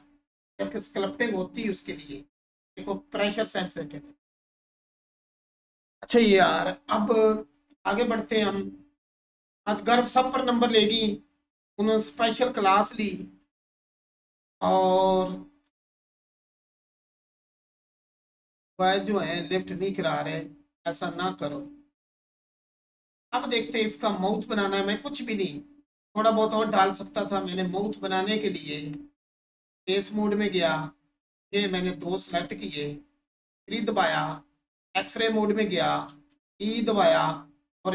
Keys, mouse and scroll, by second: 9.5 Tab, 11.8-12.4 scroll up 1, 12.9 alt+shift+click, 13.9 scroll up 1, 15.2 alt+shift+click, 30.1 click, 31.8 ctrl+click, 32.6-33.2 scroll down 1, 33.2 3, 34.7 click.